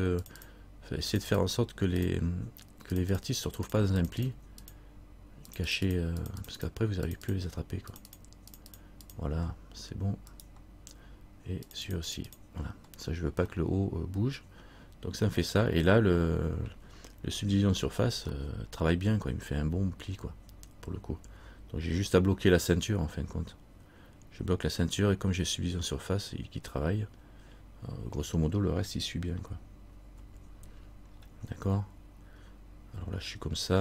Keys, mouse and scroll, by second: 10.5 right click, 11.8 click, 12.0 click, 12.5 click, 13.1-13.5 scroll down 1, 13.7 middle click, 15.2 middle click, 18.5 middle click, 21.7 scroll down 1, 30.3 KP_3, 31.3-32.4 scroll down 1.